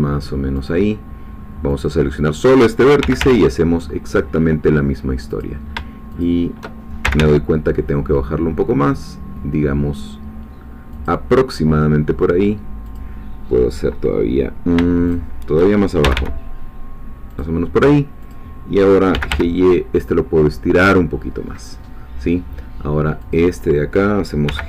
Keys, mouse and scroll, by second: 0.5 click, 1.8 click, 3.0 g, 3.2 y, 5.4 click, 6.2 shift+click, 7.0 shift+g, 10.9-13.1 drag, 15.1 shift+click, 16.0 shift+g, 17.3 click, 18.3 click, 19.1 g, 19.3 y, 20.8-23.5 drag, 24.5 g.